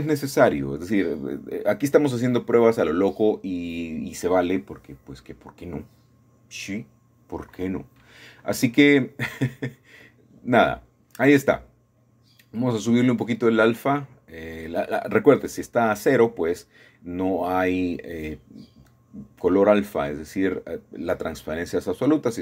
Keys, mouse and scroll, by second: 1.3 click, 4.9-7.2 drag, 7.9-9.0 scroll down 2, 9.0-11.0 middle drag, 11.3 shift+middle click, 11.7-13.0 middle drag, 13.0-16.1 drag, 16.6-18.1 drag, 20.2 middle click.